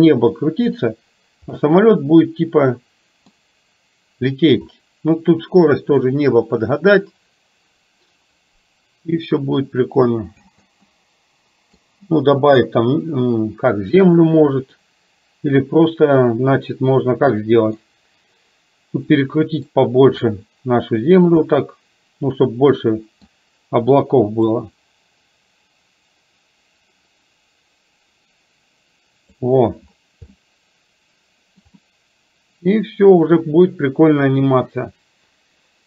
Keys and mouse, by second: 1.6-3.4 middle drag, 10.4 space, 10.9 middle click, 14.9-17.9 middle drag, 19.3 middle click, 20.4 click, 21.6-23.2 middle drag, 24.8-29.5 drag, 30.2-31.8 middle drag, 31.9 middle click.